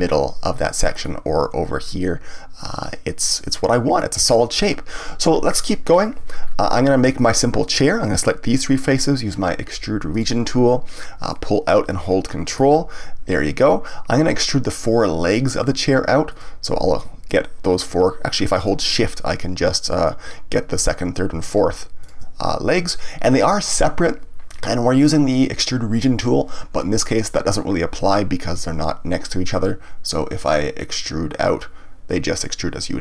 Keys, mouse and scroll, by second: 6.0 click, 6.4-7.1 scroll down 1, 7.1 shift+click, 7.7 shift+click, 10.1 click, 11.3-12.9 drag, 12.9-14.5 scroll down 1, 14.5-16.3 middle drag, 16.3 click, 17.2 ctrl+click, 18.5 click, 19.8 shift+click, 21.4 shift+click, 22.0 shift+click, 30.8-33.0 drag.